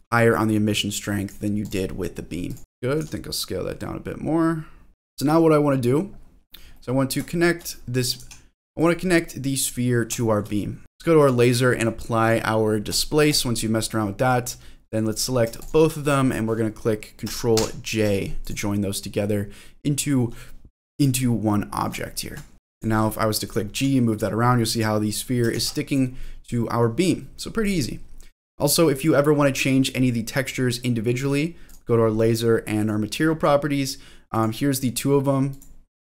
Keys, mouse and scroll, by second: 1.6 click, 2.0-2.5 scroll down 2, 2.5 click, 2.7 shift+middle click, 2.7 scroll up 3, 3.0 s, 4.9 click, 5.0 middle click, 6.1-6.7 scroll up 3, 6.7 middle click, 7.3 shift+middle click, 8.0 click, 8.2 g, 8.8 click, 9.0 middle click, 10.2 shift+middle click, 10.6 scroll down 1, 10.8 ctrl+j, 10.8 ctrl+z, 11.2 click, 12.2 click, 13.3 click, 13.8-14.3 scroll up 2, 14.3-15.1 scroll down 1, 15.1 click, 15.6 ctrl+click, 17.6 ctrl+j, 18.4 click, 19.1-20.6 scroll up 3, 20.9 click, 21.4 middle click, 22.1 shift+middle click, 22.7 click, 23.4 click, 23.9 g, 24.7 click, 25.5 ctrl+z, 25.9 click, 26.2-27.6 middle drag, 27.6 click, 29.0 click, 31.7 click, 32.8 click, 34.3 click, 34.7 click, 35.5 click, 36.0 click.